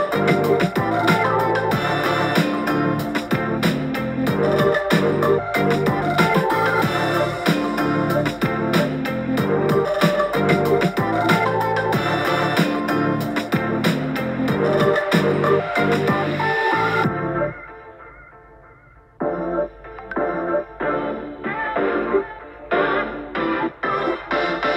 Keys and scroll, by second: 0.8 super+t, 15.3 super+t.